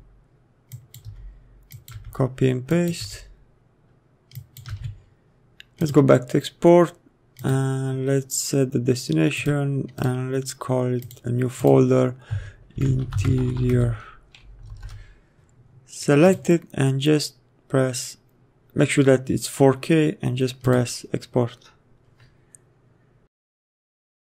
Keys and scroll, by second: 0.0 ctrl+v, 1.4 ctrl+v, 2.3 ctrl+v, 3.4 ctrl+v, 5.2 ctrl+v, 13.0 Caps_Lock, 13.4-14.4 typing, 15.4 Return.